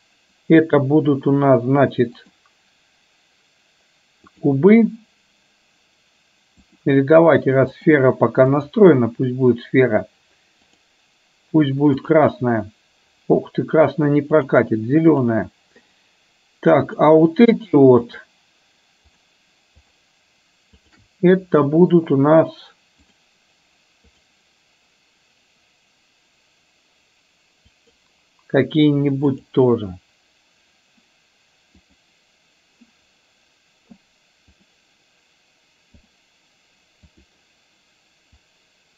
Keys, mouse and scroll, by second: 2.3-4.5 drag, 6.8-8.0 drag, 8.7-9.0 drag, 12.0 click, 15.2 click, 17.0 click, 18.3 shift+drag, 19.2 shift+click, 19.9 shift+drag, 23.2 click, 24.2-28.2 drag, 29.4 click, 32.0 click, 34.8-36.3 drag, 37.2 click, 38.4-38.9 drag.